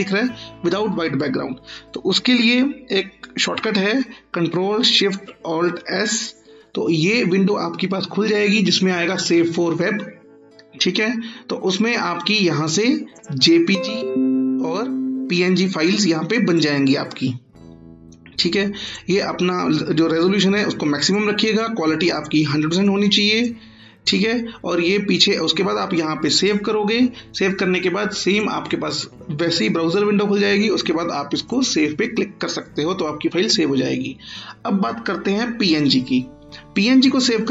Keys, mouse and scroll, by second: 4.4 ctrl+click, 5.7 ctrl+alt+shift+s, 13.1 click, 16.5 click, 26.3 click, 31.4 click.